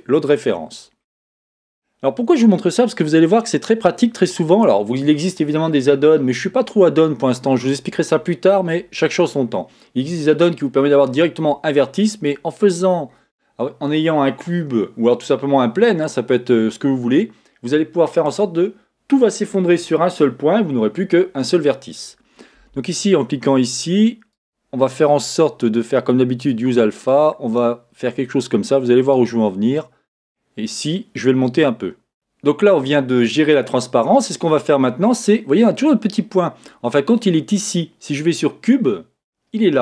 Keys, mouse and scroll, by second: 0.0 click, 0.1-1.2 middle drag, 0.7-1.2 scroll down 2, 1.2-1.5 scroll up 2, 1.3-3.7 middle drag, 1.5-3.4 scroll down 2, 3.4 scroll down 1, 3.7-7.1 scroll up 1, 23.1 click, 26.4-32.1 drag, 38.4 click.